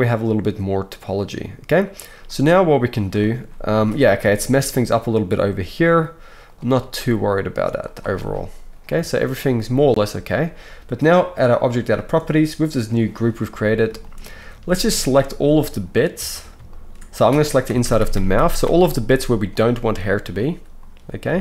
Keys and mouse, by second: 3.7 alt+a, 4.4-11.5 alt+shift+middle drag, 5.7 g, 6.8 g, 11.5 click, 11.7-14.5 shift+middle drag, 14.5 z, 16.2 alt+a, 16.7 alt+shift+click, 17.7 ctrl+KP_Add, 17.7-21.4 ctrl+middle drag, 17.8 ctrl+KP_Add, 18.1 ctrl+KP_Add, 18.4 ctrl+KP_Add, 18.6 ctrl+KP_Add, 19.1 z, 21.2 c.